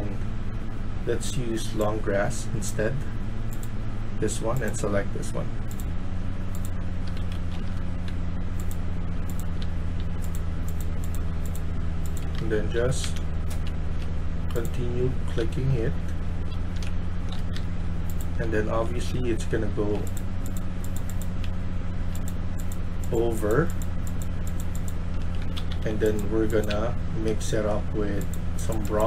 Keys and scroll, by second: 6.7-9.5 typing, 11.9-18.6 typing, 21.4-22.0 a, 25.2-26.6 typing, 28.6-29.0 typing.